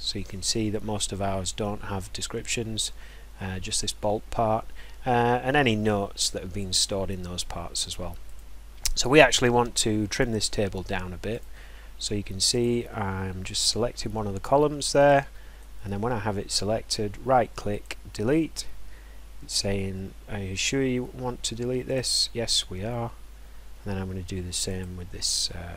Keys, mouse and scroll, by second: 8.3 click, 9.4 click, 11.4 click, 12.6 click, 15.6 right click, 17.8 click, 20.7-25.7 drag.